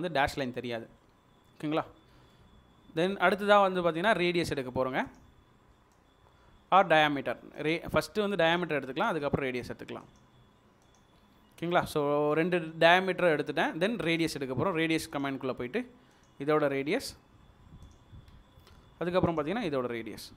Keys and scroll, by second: 9.0 space, 18.3 space.